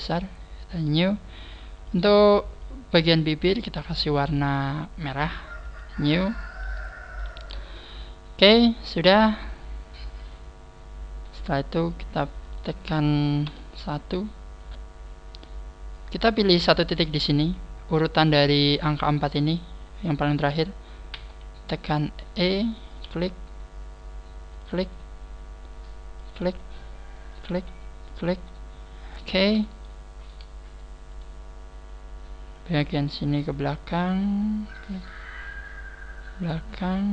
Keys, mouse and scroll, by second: 6.6-7.9 scroll down 7, 7.5 a, 7.9 middle click, 10.0 scroll up 2, 12.4 right click, 13.5 KP_1, 21.1 e, 22.9 click, 23.1 e, 24.7 click, 24.8 e, 26.3 click, 26.5 e, 27.3 click, 27.5 e, 28.1 click, 29.2 click, 29.8 shift+middle click, 31.1 right click, 31.9 click, 32.9 right click, 33.5 click, 34.7 right click, 35.2 click.